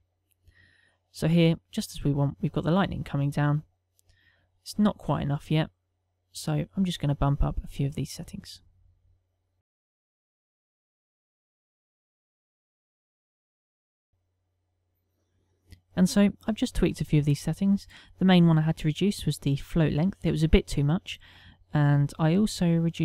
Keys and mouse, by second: 0.2 shift+middle click, 5.3 middle click, 13.5 click, 14.2 middle click, 15.4 click, 16.3 middle click, 18.2 middle click, 22.3 middle click.